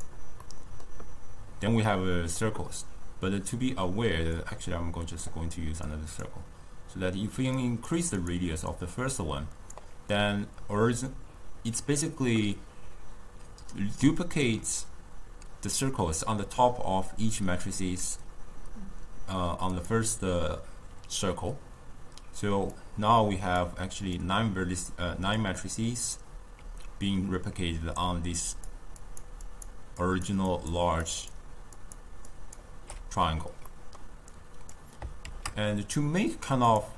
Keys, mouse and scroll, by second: 0.5-4.4 middle drag, 4.4 click, 5.9-8.3 drag, 8.7-11.8 drag, 19.8 click, 22.5 d, 22.9 click, 23.6-24.1 d, 24.2 click, 24.9-25.3 d, 25.4 click, 26.2 d, 28.1-32.9 typing, 28.5 click, 29.1 click, 29.5 click, 30.0 click, 30.5 click, 31.1 click, 31.8 click, 32.3 click, 33.7 middle click, 34.3 click, 35.8 shift+d.